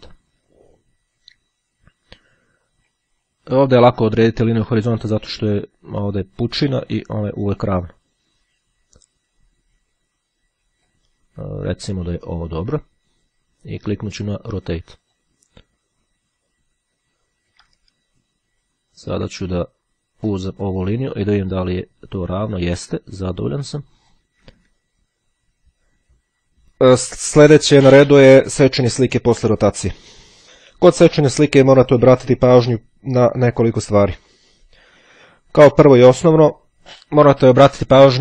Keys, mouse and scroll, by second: 6.7-11.5 drag, 15.1 click, 18.1-18.6 ctrl+scroll down 3, 18.9-19.9 ctrl+scroll up 3, 20.5-24.8 drag, 25.1-25.7 ctrl+scroll down 2, 26.3-26.6 ctrl+scroll down 2.